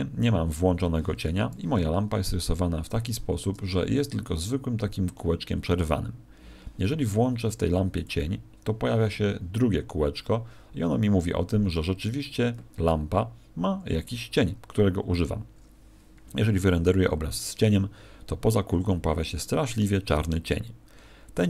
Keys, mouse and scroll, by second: 1.2 Escape, 2.0-2.8 scroll up 1, 2.8 a, 7.9 click.